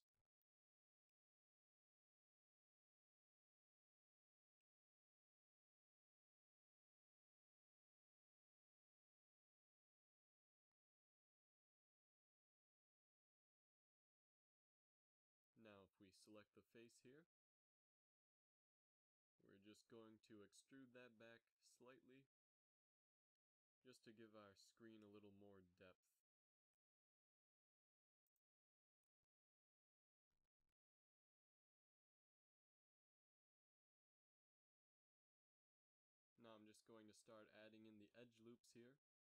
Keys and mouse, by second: 3.0 ctrl+r, 6.5 ctrl+r, 9.8 ctrl+r, 12.9-14.0 middle drag, 14.4 a, 15.6 right click, 20.4 KP_3, 20.9 z, 25.1-27.7 typing, 30.3 a, 30.6 ctrl+Tab, 31.5 middle click, 32.0 z, 32.4 right click, 33.6 KP_3, 34.5 z, 35.2 e, 37.8 KP_1, 38.2 z.